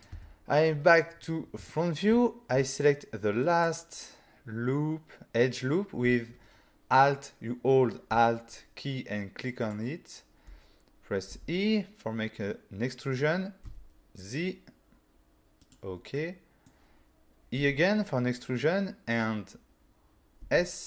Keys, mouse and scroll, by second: 0.1 1, 1.1-1.6 scroll up 4, 1.7 shift+middle click, 3.5 alt+click, 9.6 alt+click, 11.3 e, 13.6 z, 15.6 click, 16.2 middle click, 17.6 e, 20.4 s.